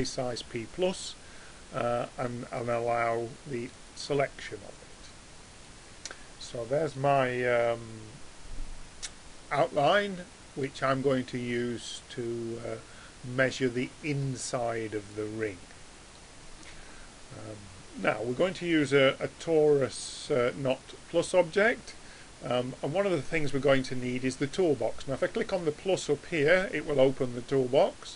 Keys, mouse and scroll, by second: 2.6-5.5 drag, 5.7-15.8 middle drag, 25.4-27.2 drag, 27.8-28.1 drag.